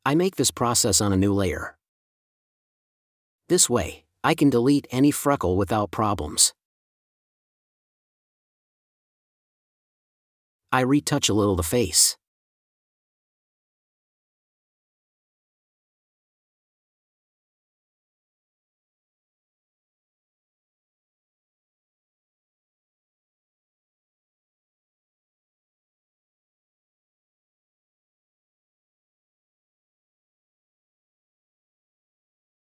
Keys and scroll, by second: 0.6 super+space, 7.0 space, 10.8 space, 19.5 space, 21.2 4, 22.7 super+e, 25.2 space, 29.4 space, 31.9 space, 32.5 super+space.